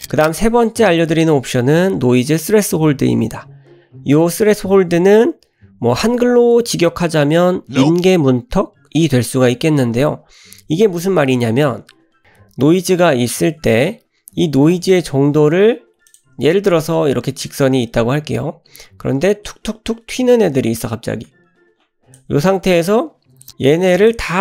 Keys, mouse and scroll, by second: 16.1 click, 17.6-22.1 drag, 23.9 click.